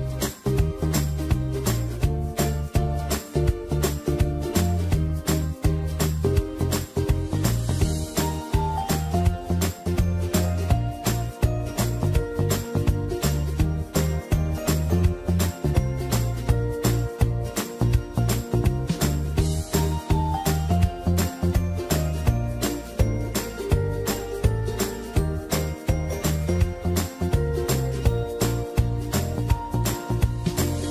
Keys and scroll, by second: 1.7 alt+shift+Return, 5.1 ctrl+a, 8.0 ctrl+d, 8.7 ctrl+t, 12.3 alt+shift+Return, 25.0 ctrl+a.